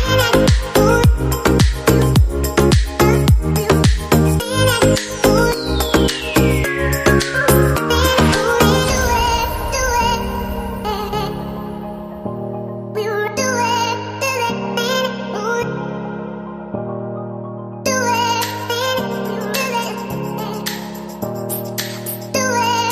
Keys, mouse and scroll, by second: 19.7 right click, 21.6 ctrl+Up, 22.6 ctrl+Up.